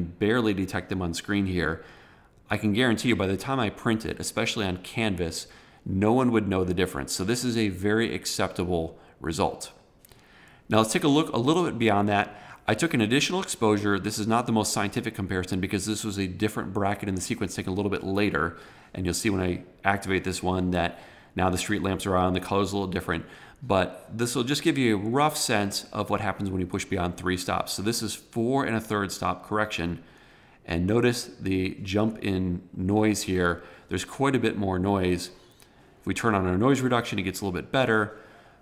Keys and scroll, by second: 23.8 super+=.